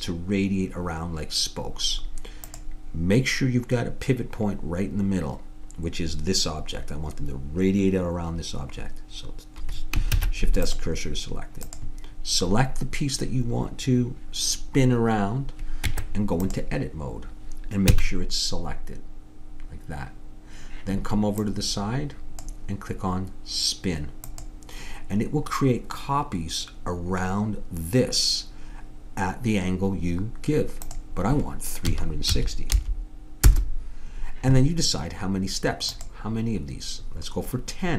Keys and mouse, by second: 2.5-7.0 drag, 10.2 shift+s, 11.7-13.6 drag, 15.9 Tab, 17.9 a, 21.5-23.2 drag, 24.3-26.0 drag, 30.9-32.7 drag, 36.0-37.7 drag.